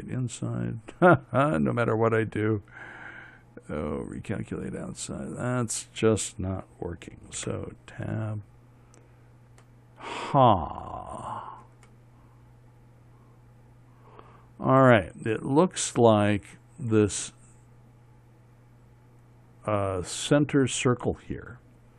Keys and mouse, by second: 7.9 Tab, 11.2-17.1 middle drag.